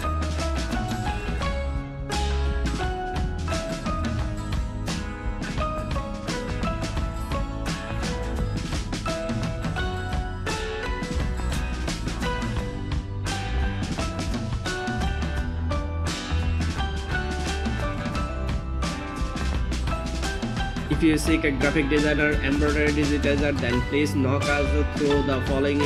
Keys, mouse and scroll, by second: 4.8 super+click, 6.5 super+click, 11.2 super+click, 12.8 super+click, 14.6 super+click, 16.5 super+click.